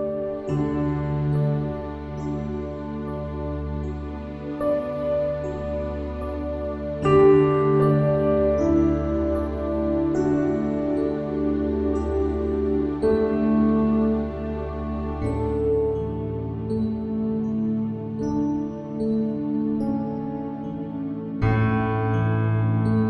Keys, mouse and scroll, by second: 0.1 Tab, 0.8 Tab, 3.5 KP_3, 5.6-8.2 drag, 9.7-13.7 middle drag, 13.4 Tab, 20.2 Tab, 21.1 KP_1.